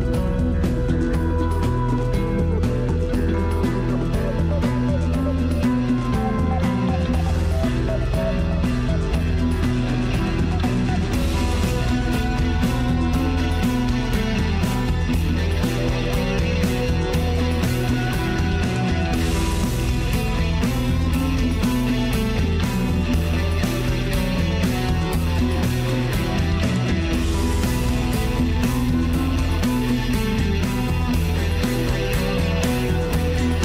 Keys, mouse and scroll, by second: 1.5-3.0 drag, 3.8-6.5 middle drag, 6.5 ctrl+r, 11.0 scroll up 2, 12.1-13.7 drag, 15.3-15.6 scroll down 2, 15.9-17.0 middle drag, 17.0 scroll up 1, 17.2-19.6 shift+middle drag, 20.9 ctrl+r, 24.0 middle click, 24.4-25.5 scroll up 1, 25.5 ctrl+r, 30.7 ctrl+r.